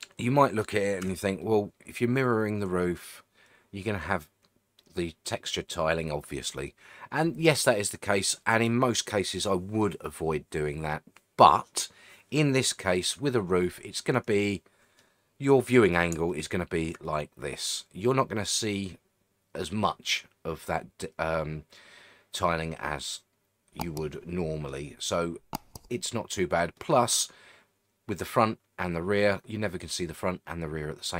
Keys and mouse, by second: 1.0 Tab, 1.4-3.8 middle drag, 4.8-5.1 middle drag, 6.7-8.2 middle drag, 14.0-15.0 middle drag, 15.4-15.9 middle drag, 16.3-16.9 shift+middle drag, 17.1-24.7 middle drag, 25.6-26.6 middle drag, 26.8-31.1 middle drag.